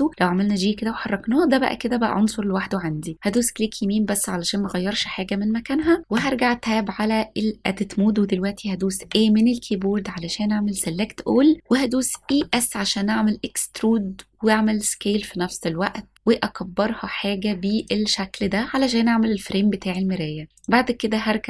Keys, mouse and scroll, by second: 0.1 g, 3.3-4.6 right drag, 5.0 middle click, 6.1 Tab, 9.0 a, 12.2 e, 12.4 s, 17.8 click, 20.5-21.4 drag.